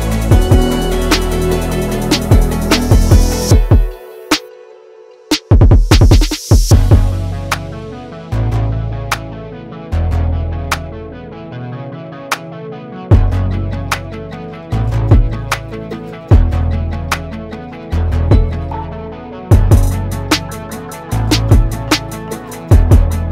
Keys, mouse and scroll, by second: 4.6 click, 11.0 click, 14.2 Right, 15.3 Left, 16.0 click, 17.7 Right, 19.7 Right, 19.8 ctrl+c, 20.1 ctrl+f, 21.4-23.3 drag.